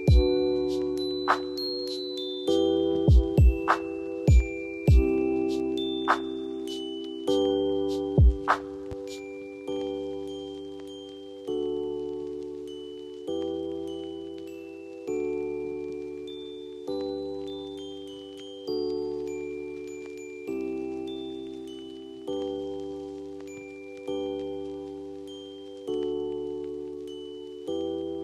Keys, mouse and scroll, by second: 0.4-0.7 alt+scroll down 7, 2.2-3.8 alt+scroll up 11, 3.8 ctrl+z, 12.3 alt+scroll down 7, 14.1-15.2 alt+scroll down 11, 16.4 ctrl+t, 16.4-17.3 alt+scroll down 1, 17.8 alt+click, 18.0 alt+scroll, 18.0 alt+scroll up 3, 19.3 alt+click, 22.8 alt+scroll, 22.8 alt+scroll up 2, 23.3 alt+scroll down 1, 24.2 alt+scroll down 4, 27.8 alt+click.